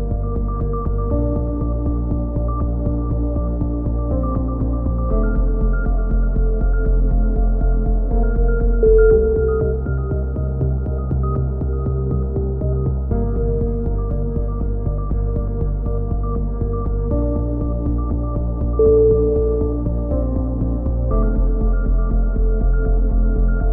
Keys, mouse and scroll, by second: 1.4 z, 6.4 z, 7.3 a, 8.0 middle click, 8.7 z, 12.7-14.1 middle drag, 14.4 ctrl+r, 15.8-17.5 typing, 19.0 z, 19.5 click, 20.4-22.7 middle drag, 22.7 right click, 23.6 x.